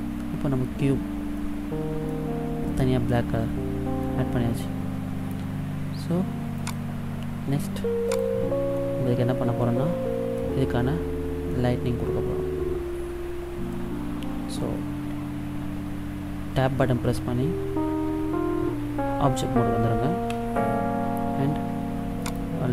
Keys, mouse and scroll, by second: 1.7 middle click, 4.3 middle click, 6.9 click, 8.9 middle click, 10.8 scroll down 3, 11.7 middle click, 20.5 Tab, 22.4 right click.